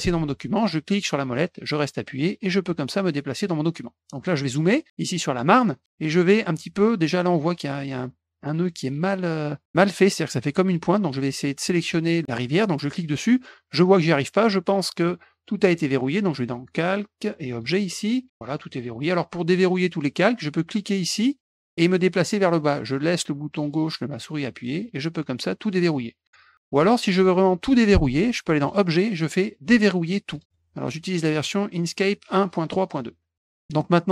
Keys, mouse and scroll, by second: 1.1-3.4 middle drag, 4.6 middle click, 5.3 middle click, 5.6 scroll up 1, 12.8 click, 15.0 click, 17.5 click, 21.4-25.7 drag, 28.6 click, 30.3 click, 30.4 click, 31.3 click, 33.3 click.